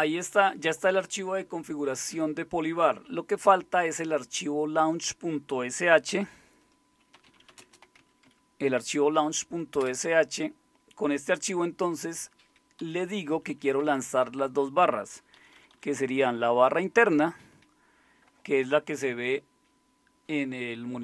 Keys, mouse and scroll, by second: 6.9-8.5 typing, 9.8 Return, 12.8 Down, 13.0 Down, 13.2 Down, 13.3 Down, 13.5 Down, 13.7 Down, 13.8 Down, 15.7 Down, 16.3-17.5 Right.